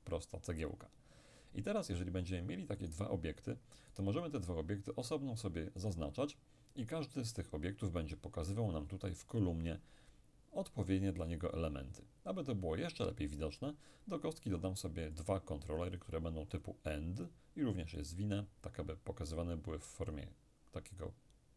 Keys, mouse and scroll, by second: 2.8-3.9 middle drag, 5.1-7.9 right drag, 15.2-19.3 drag.